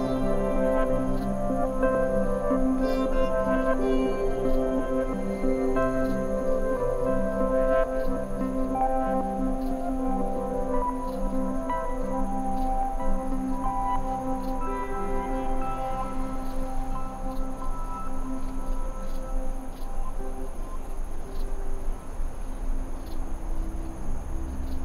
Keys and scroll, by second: 1.1 BackSpace, 1.4 super+d, 3.0 super++, 3.3 super+space, 6.4 i, 14.0 super+-, 16.8 super++, 16.9 super+space, 21.5 super+c, 21.6 super+v, 22.1 super+-, 23.1 v.